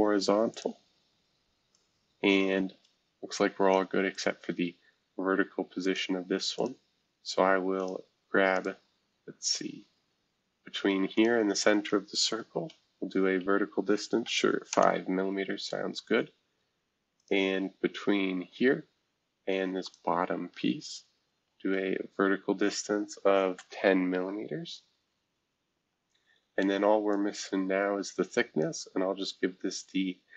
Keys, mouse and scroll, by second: 0.5 click, 1.7-3.7 drag, 4.1 click, 5.8 click, 6.5 click, 7.7 click, 8.5 click, 9.4 click, 11.1 shift+click, 14.2 5, 14.7 Return, 15.6 scroll down 2, 17.2 click, 17.8 scroll down 1, 19.8-21.4 shift+drag, 21.4 v, 22.8-23.8 typing, 25.1 scroll down 1, 27.1-30.2 drag, 30.2 scroll down 2.